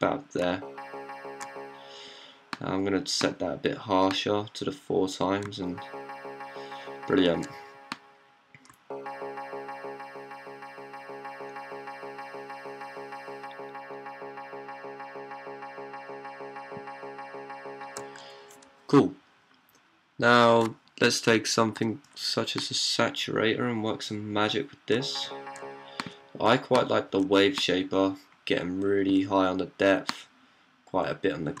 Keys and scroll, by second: 0.3-1.2 d, 3.5 typing, 5.3-7.2 typing, 8.5-9.5 typing, 11.8 typing, 13.0 typing, 24.8 d, 25.3 d, 25.4 d, 31.4-31.6 typing.